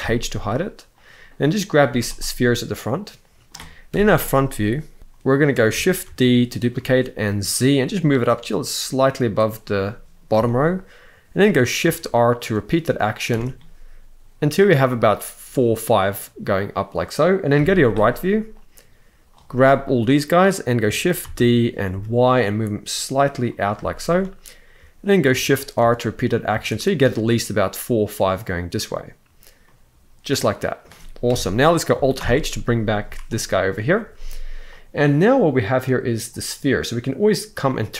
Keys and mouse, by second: 0.7 click, 1.6 z, 2.4-3.2 middle drag, 3.6 KP_1, 5.0 shift+middle click, 5.8 shift+d, 6.5 z, 10.2 shift+middle drag, 11.6 shift+r, 12.2 shift+r, 13.0 shift+r, 17.3 KP_3, 18.4-19.0 drag, 21.0 shift+d, 21.6 y, 23.6 shift+middle drag, 25.0 shift+r, 25.5 shift+r, 26.2 shift+r, 29.4-30.6 middle drag, 31.0 KP_1, 31.9 alt+h, 32.8 z, 34.4 click, 37.5 click.